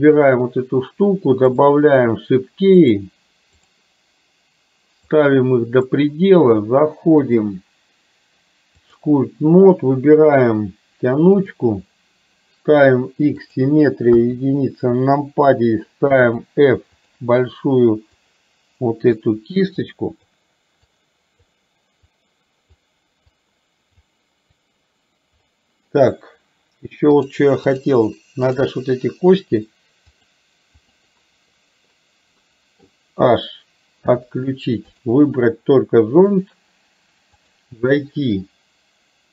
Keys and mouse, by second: 1.7 click, 2.9 click, 5.3 click, 7.4-9.0 drag, 11.5 click, 13.5 click, 14.2 KP_1, 16.2 f, 18.3-19.3 drag, 19.9 click, 20.9 click, 22.2 click, 23.3 click, 24.5-25.5 drag, 27.3 click, 28.5 click, 30.2 click, 30.9 click, 32.5 middle click, 36.5-37.7 drag.